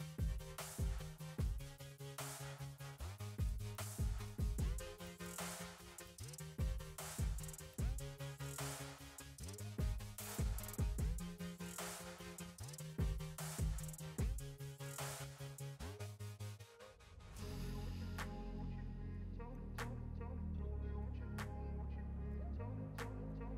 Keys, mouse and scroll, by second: 3.1 click, 4.0 click, 8.1 click, 9.7 click, 10.5 click, 12.2 click, 12.7-13.1 scroll down 6, 14.8 s, 15.6 right click, 16.3 r, 17.3 click, 17.8 click, 18.8 click, 19.5 click, 21.0-23.5 drag.